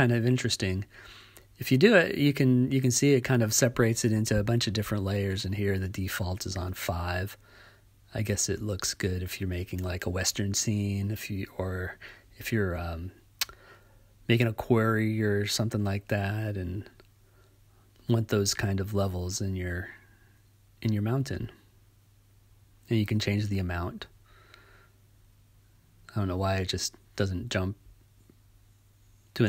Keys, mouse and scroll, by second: 8.9-10.8 drag, 12.0-13.7 drag, 15.0 click, 16.2-17.8 drag, 18.1 click, 22.2 click, 23.4 click, 24.7-25.5 drag, 25.6-27.4 drag.